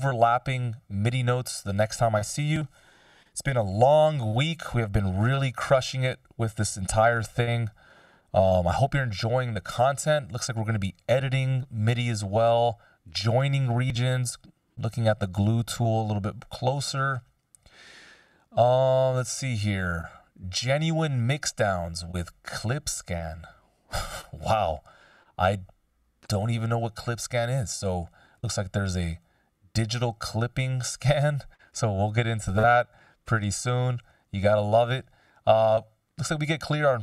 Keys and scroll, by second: 5.8 super+s, 6.9 super+d.